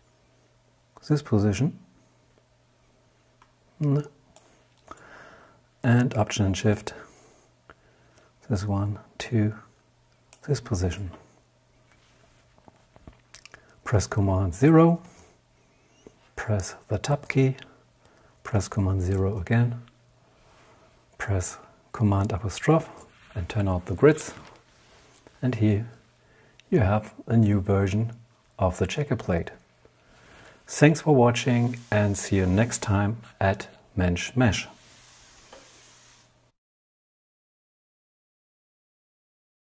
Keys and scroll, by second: 14.0 super+0, 18.1 super+0, 21.7 super+'.